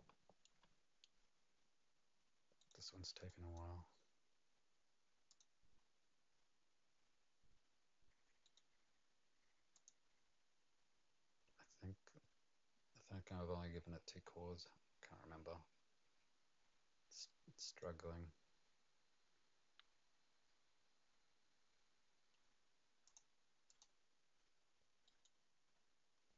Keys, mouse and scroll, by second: 2.6 right click, 3.3 click, 5.3 click, 8.4 right click, 9.7 click, 17.2 right click, 23.0 click, 23.7 click, 25.0 right click.